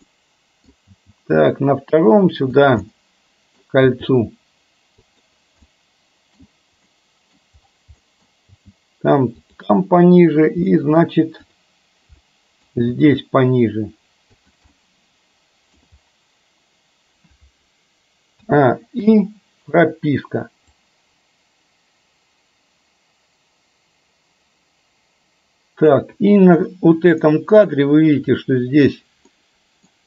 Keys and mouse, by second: 0.2-0.7 middle drag, 1.0 g, 3.0 middle click, 4.0 g, 5.8 middle click, 7.1 middle click, 8.1 middle click, 8.6 g, 10.8 middle click, 11.7 click, 12.3 middle click, 13.1 g, 14.8-15.8 middle drag, 18.5 a, 19.1 i, 20.8-26.1 drag, 27.3 middle click, 29.3-30.0 middle drag.